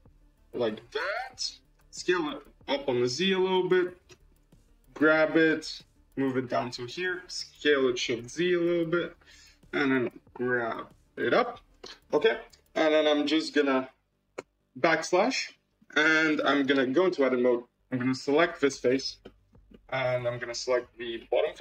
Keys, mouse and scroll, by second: 2.0 s, 4.2 f, 4.8 g, 7.4 s, 9.9 g, 11.7-14.1 middle drag, 14.3 /, 14.9 scroll up 3, 15.3-15.9 shift+middle drag, 16.2 middle click, 16.6 Tab, 17.1-17.5 scroll up 1, 17.5 click, 18.6 3, 18.7 click, 19.1-20.2 middle drag, 20.2-21.1 scroll down 14, 21.1 shift+middle click.